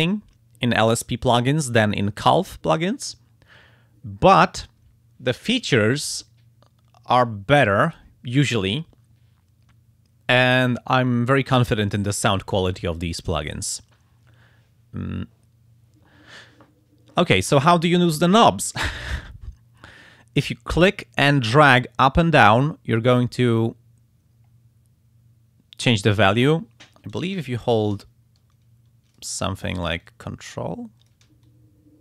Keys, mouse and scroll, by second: 20.9-29.4 drag, 30.0-31.3 ctrl+drag, 31.5-32.0 ctrl+shift+drag.